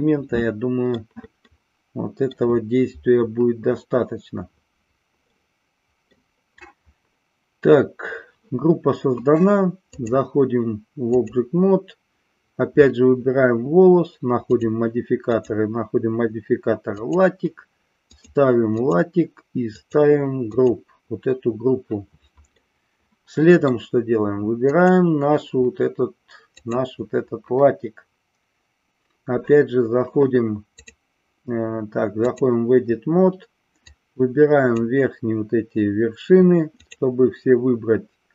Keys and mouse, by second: 1.5-2.2 middle drag, 5.2-6.1 middle drag, 9.9-11.4 drag, 14.5 click, 15.4-17.1 drag, 18.1 click, 19.7-20.7 drag, 22.5-23.7 middle drag, 24.6 click, 26.5 click, 30.9-32.4 drag, 33.9 click.